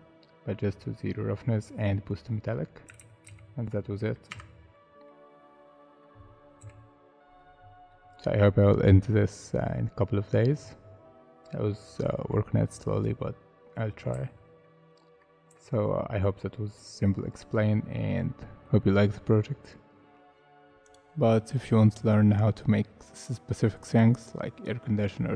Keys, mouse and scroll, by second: 3.0 ctrl+z, 3.3 ctrl+z, 3.9 middle click, 4.3 Tab, 4.7 middle click, 5.3 scroll down 1, 5.8 middle click, 6.6 /, 7.9 middle click, 11.0 scroll down 1, 11.7 middle click, 12.3-13.2 scroll down 1, 14.1 z, 14.6 middle click, 15.5 z, 16.0 scroll down 1, 16.3-16.7 scroll up 1, 16.7 middle click, 20.2 alt+Tab, 23.0 scroll up 1.